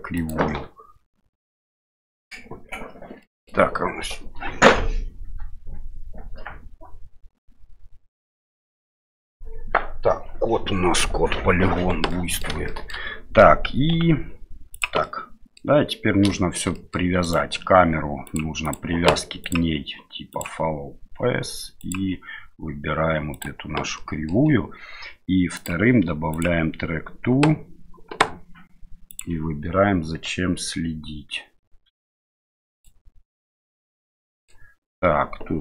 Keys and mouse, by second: 3.3 middle click, 12.2 middle click, 12.7-13.0 shift+middle drag, 13.9 s, 15.0-15.6 middle drag, 16.4 middle drag, 16.7 middle click, 17.2 right click, 18.7 click, 19.5-20.4 drag, 21.8 click, 24.0 middle click, 25.6-26.4 drag, 29.2 click, 33.5-34.6 middle drag.